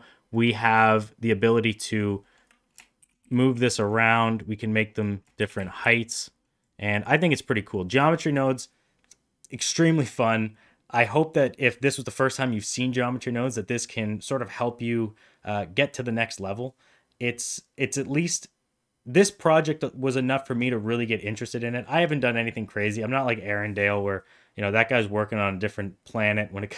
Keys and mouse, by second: 0.2-1.9 drag, 2.1 middle click, 2.9 shift+d, 4.4 click, 5.3 shift+d, 6.6 click, 7.4 middle drag.